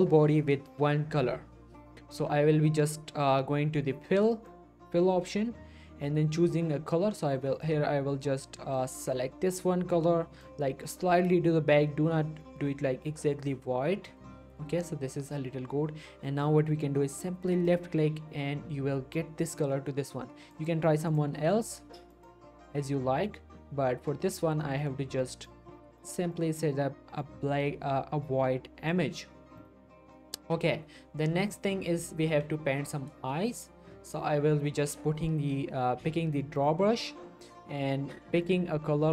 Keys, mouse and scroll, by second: 4.3 click, 7.6-10.6 drag, 17.7 click, 20.5-29.1 drag, 29.9 click, 32.7 click, 33.1 scroll up 1, 33.3-35.4 shift+middle drag, 36.6 click.